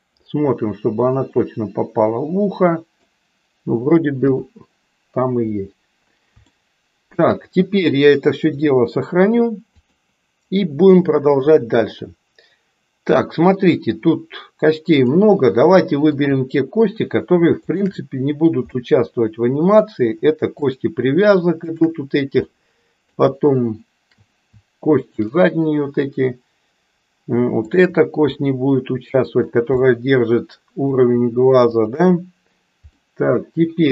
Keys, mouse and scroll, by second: 1.4-3.0 middle drag, 4.3 KP_1, 6.5 shift+middle click, 8.5-10.0 drag, 15.0 click, 16.1 shift+click, 18.7-19.9 middle drag, 20.7 shift+click, 22.5 middle click, 25.0 shift+click, 27.6 shift+click, 28.5-29.6 middle drag, 29.9-30.9 middle drag, 33.0-33.9 middle drag.